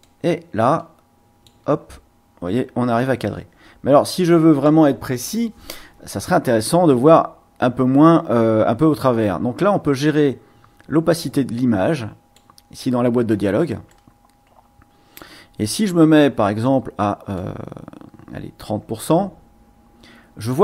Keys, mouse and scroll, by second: 0.0-1.6 drag, 3.0-4.8 drag, 8.8-12.5 drag, 13.9-15.0 drag, 15.0 middle click, 17.3 click, 17.9 click, 18.4-20.6 drag.